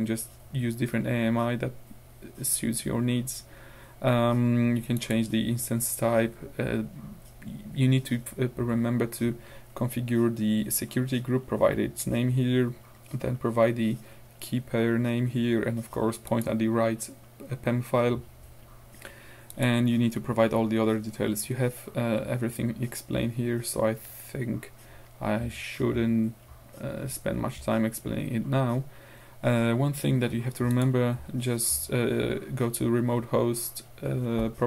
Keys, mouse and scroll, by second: 5.0 click, 16.3 click, 19.5 click, 28.7-29.1 scroll down 2, 30.8 click.